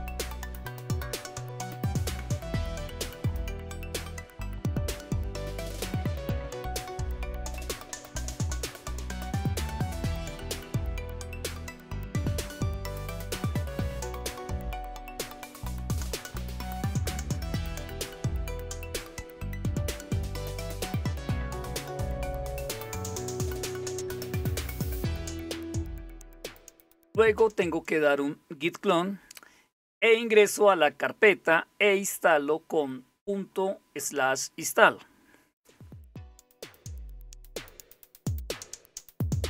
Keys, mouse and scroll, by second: 5.6 click, 7.4 click, 9.9 click, 13.7 click, 17.9 End, 18.1 Down, 19.1 Return, 21.1-22.2 typing, 22.3 Return, 25.8 click, 26.5 click, 27.2-28.1 typing.